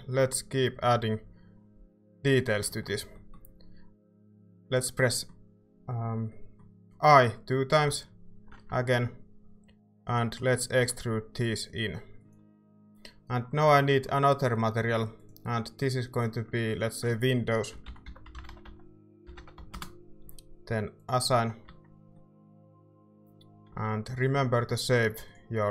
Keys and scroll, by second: 7.7 i, 7.9 i, 10.8 e, 17.5-19.9 typing, 21.6 Tab, 21.9-23.1 typing, 23.7 ctrl+s.